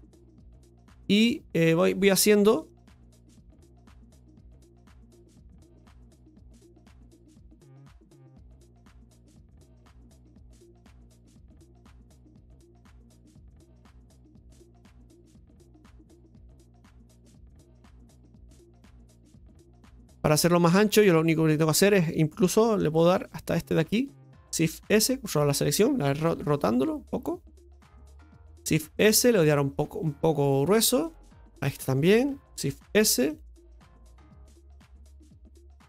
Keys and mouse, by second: 0.7-2.7 middle drag, 2.7-6.6 drag, 6.6 right click, 7.4 right click, 7.8 alt+shift+right click, 8.0 alt+shift+right click, 8.9 click, 10.5-11.8 drag, 12.5 click, 14.2 right click, 14.6 alt+shift+right click, 14.8 alt+shift+right click, 15.7-16.9 drag, 18.1 Tab, 18.7 right click, 19.1-20.2 middle drag, 20.4 shift+middle drag, 20.9 right click, 21.1 Tab, 21.8 middle click, 23.1 right click, 23.5 right click, 24.8 shift+s, 27.7 r, 28.6 shift+s, 31.5 alt+shift+right click, 35.2-35.8 shift+middle drag.